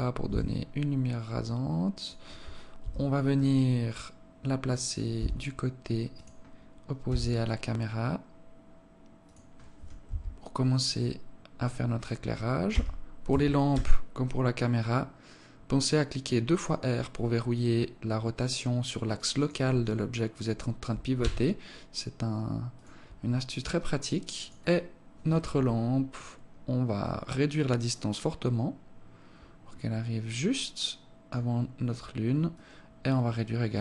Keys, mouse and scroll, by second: 2.2 KP_7, 3.4-3.7 scroll down 1, 4.6 g, 6.5 r, 9.5 KP_1, 12.1 r, 20.6 s, 23.9 click, 26.4 click, 32.0 click.